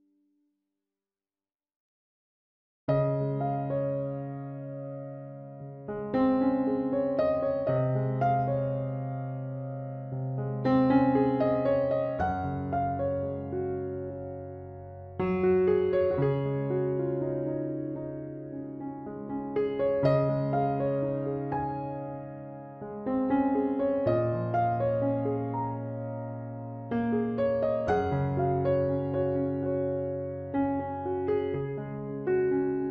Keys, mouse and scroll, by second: 1.8 right click, 2.4 b, 2.8 g, 4.9-5.9 middle drag, 6.5 ctrl+r, 8.1 g, 9.9 g, 11.2 g, 12.9 g, 14.4 g, 16.1 g, 18.4 ctrl+s, 19.3 ctrl+r, 26.2-28.1 right drag, 26.4 g, 29.4 ctrl+s, 30.7 middle click, 32.8 ctrl+Tab.